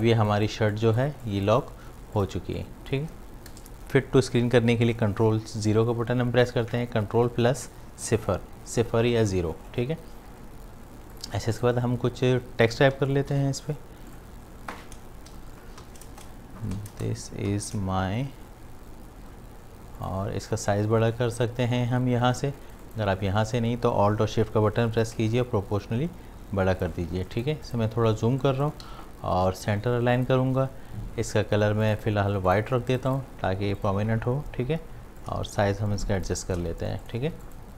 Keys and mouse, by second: 2.0 ctrl+space, 2.2 ctrl+click, 2.8 space, 11.1 click, 13.3 t, 14.1 click, 15.1-18.1 typing, 20.0 click, 25.0-27.3 alt+drag, 27.8 ctrl+click, 28.9 v, 30.2 click, 35.5-36.6 alt+shift+drag, 36.7 shift+v.